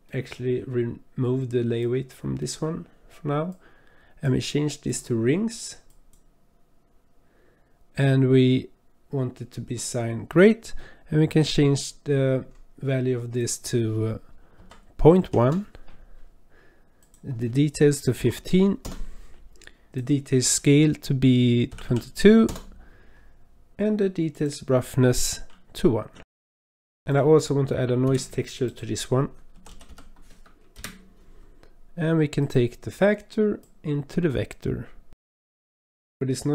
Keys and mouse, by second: 0.1 click, 1.9-2.6 drag, 3.8 click, 4.9-6.3 drag, 10.8 middle click, 13.4-15.4 drag, 17.0-18.8 drag, 19.9-22.5 drag, 21.9 KP_2, 24.3-26.2 drag, 26.5 click, 26.6 middle drag, 27.1 click, 28.0 shift+a, 33.6 click, 33.8-35.2 drag, 35.5 click.